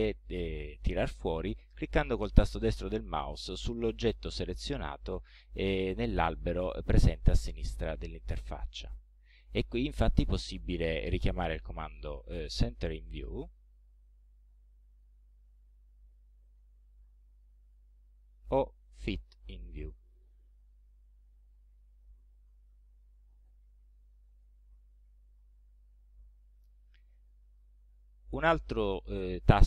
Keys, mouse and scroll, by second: 8.3 right click, 13.2 click, 14.7-15.0 scroll down 2, 15.0 right click, 16.5 right click, 17.7 click, 18.8 right click, 20.1 click, 21.8-24.6 drag, 25.1-25.5 scroll down 2, 25.7-26.2 scroll up 2, 27.3 middle click, 27.9 scroll down 2, 28.5 click.